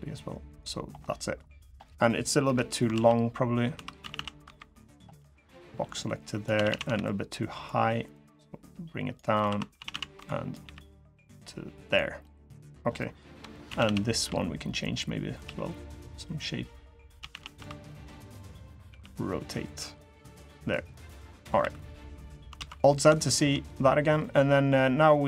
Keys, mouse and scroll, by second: 0.5 scroll down 3, 0.8 middle click, 1.4 middle click, 2.2 KP_3, 2.7 alt+z, 3.2-3.5 scroll down 1, 3.5 1, 3.8 a, 3.9 a, 4.2 b, 5.6 click, 6.3 a, 6.4 a, 6.7 b, 8.0 click, 9.1-10.4 typing, 12.0 middle click, 13.1 KP_3, 13.4 a, 13.6 a, 13.9 b, 15.2 g, 16.9-19.5 typing, 20.3 middle click, 21.0 middle click, 21.3 3, 21.7 middle click, 22.3 alt+z, 22.5 middle click, 22.9 shift+scroll up 1, 23.0 shift+middle click, 23.9 middle click, 24.7 middle click.